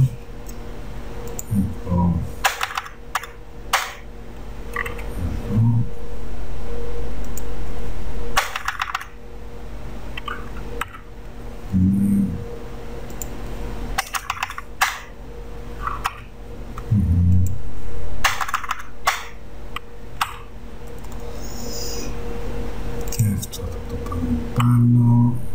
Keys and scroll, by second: 0.2 space, 2.6 BackSpace, 3.3 BackSpace, 5.1 -, 8.5 BackSpace, 14.2 BackSpace, 16.2 -, 18.4 BackSpace, 20.4 -, 24.8 Up.